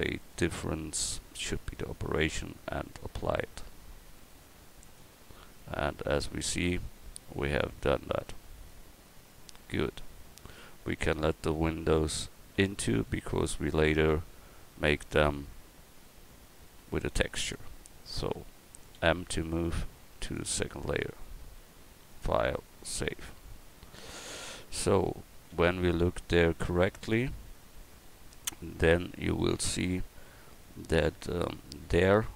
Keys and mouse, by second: 5.6-8.7 drag, 8.7-24.8 middle drag, 24.8 KP_1.